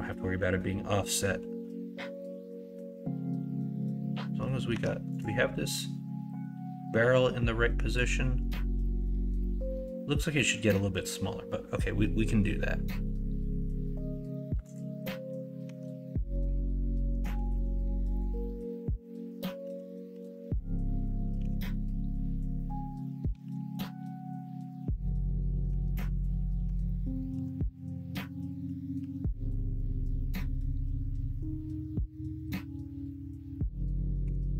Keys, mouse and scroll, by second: 4.7 Tab, 15.6 Tab, 17.2 g, 18.3 middle click, 19.6 KP_1, 20.0 KP_3, 21.3 g, 24.3 s, 25.2 middle click, 25.6 Tab, 26.6 Tab, 27.3 KP_1, 27.5 KP_3, 28.9 ctrl+r, 29.1-33.4 ctrl+drag, 34.2-34.5 drag, 34.2 3.